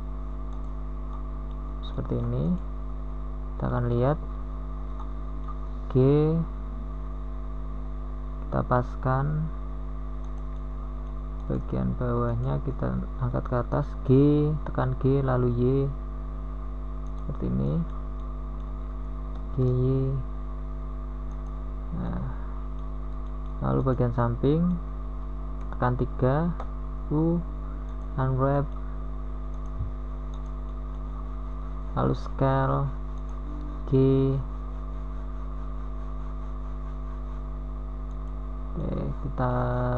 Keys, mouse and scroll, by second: 6.3 Tab, 9.0 g, 17.2 g, 23.0 g, 29.6 KP_3, 32.0 u, 36.1 s, 38.1 g.